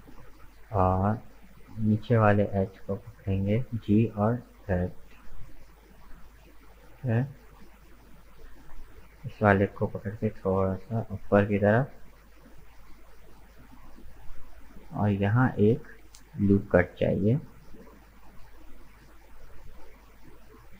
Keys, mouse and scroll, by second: 0.9-1.9 drag, 1.9 right click, 2.7 middle click, 3.5 g, 6.7-8.4 middle drag, 8.4 right click, 8.8-9.9 middle drag, 9.9 g, 13.1-16.2 middle drag, 16.2 ctrl+r, 18.5 right click, 19.1-20.1 middle drag, 20.1 right click.